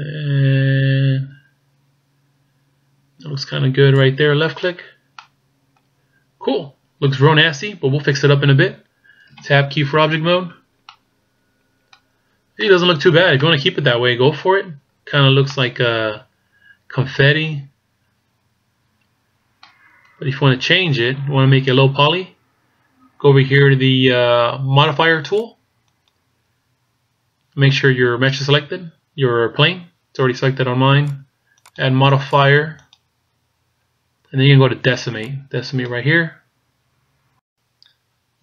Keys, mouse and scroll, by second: 4.8 middle click, 5.5-7.9 scroll up 1, 9.9 Tab, 10.3 middle click, 11.6-12.2 scroll up 2, 12.1 middle click, 12.2-13.0 scroll down 4, 13.0 middle click, 13.6-14.2 scroll up 3, 15.0 middle click, 20.1-23.3 scroll down 1, 26.4 click, 31.5 click, 32.3 click.